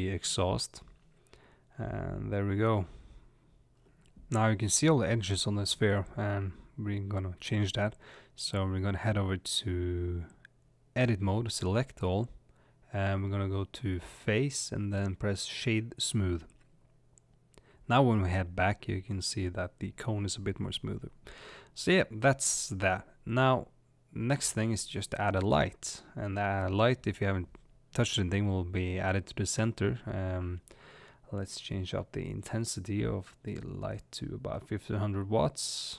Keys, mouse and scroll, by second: 5.4 click, 5.8-6.9 middle drag, 6.6 scroll up 1, 6.8-7.2 scroll down 2, 7.2-10.6 middle drag, 10.6 Tab, 11.3 click, 12.4 click, 12.8 a, 15.5 click, 16.4 middle click, 17.1 Tab, 17.1-23.4 middle drag, 34.9 click.